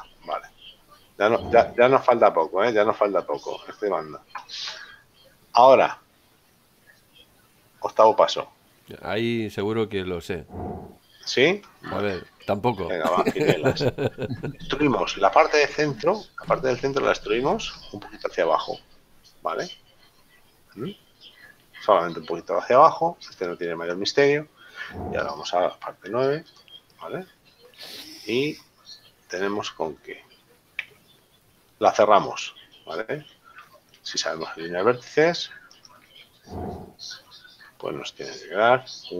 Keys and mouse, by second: 1.7 shift+middle click, 6.7 click, 9.8 click, 13.1 Tab, 14.4 middle click, 20.5 middle click, 25.4 click, 27.1 click, 29.1 shift+middle click, 31.2 Tab, 34.1 middle click, 36.2 shift+middle click, 38.5 middle click.